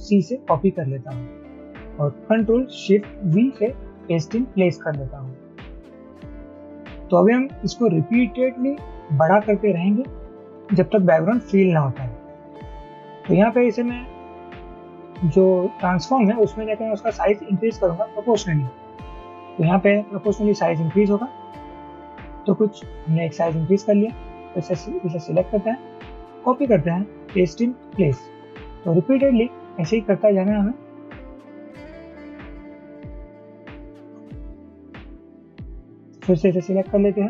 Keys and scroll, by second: 0.2 ctrl+c, 3.4 ctrl+shift+v, 19.6 shift+Up, 21.3 shift+Up, 21.6 shift+Up, 21.8 shift+Up, 26.4 ctrl+c, 28.0 ctrl+shift+v, 32.0 shift+Up.